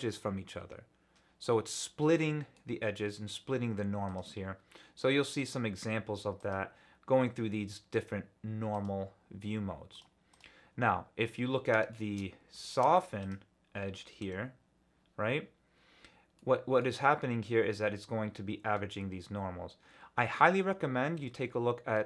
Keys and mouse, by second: 2.2 click, 4.1-6.8 drag, 8.7-10.6 drag, 11.6 Tab, 11.9 shift+drag, 12.6 shift+middle drag, 14.2 Tab, 16.4 middle click.